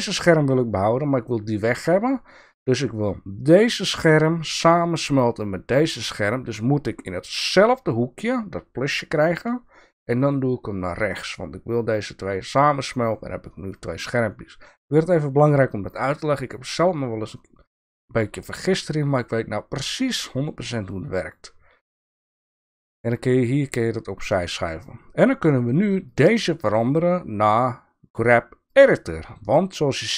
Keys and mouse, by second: 9.2-12.6 drag, 17.1-21.5 drag, 23.8 click, 26.0-28.9 drag.